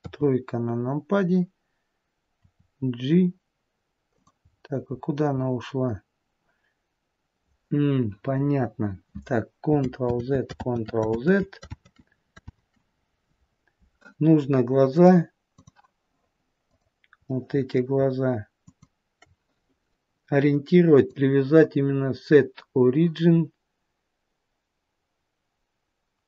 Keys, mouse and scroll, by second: 0.3 KP_3, 2.7 r, 4.7-5.6 scroll down 5, 5.6-8.3 scroll up 4, 10.4 ctrl+z, 10.9 ctrl+z, 11.5 ctrl+z, 12.1 ctrl+z, 12.8 ctrl+z, 15.2 click, 17.0 click, 17.6 middle click, 18.9 shift+click, 21.2 click.